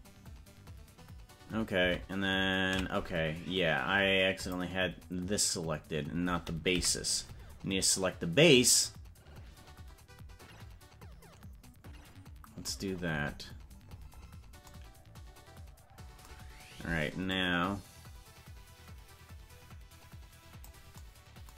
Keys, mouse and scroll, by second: 0.3 ctrl+z, 3.8 scroll up 1, 4.4 scroll up 3, 4.5 click, 6.7 KP_Decimal, 8.8-12.6 drag, 13.2 Tab, 13.6-14.2 scroll down 15, 17.4-20.8 drag.